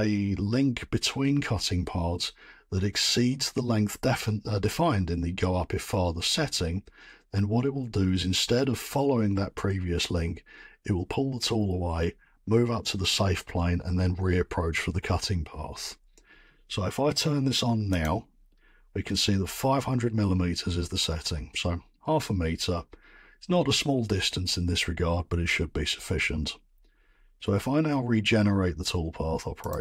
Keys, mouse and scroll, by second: 18.0 click, 29.7-29.8 drag.